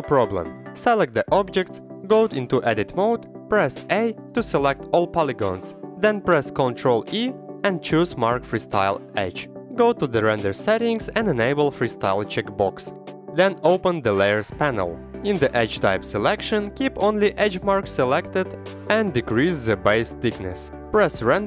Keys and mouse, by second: 0.7 click, 2.6 click, 3.2 Tab, 3.5 click, 4.0 a, 4.2 click, 5.5 ctrl+e, 8.3 click, 8.9 Tab, 9.5-10.0 middle drag, 11.0-12.5 drag, 12.9-14.0 drag, 14.0 middle click, 14.5 click, 16.3-17.8 drag, 18.6-19.7 drag, 20.1 middle drag, 20.7 middle click, 21.3 click.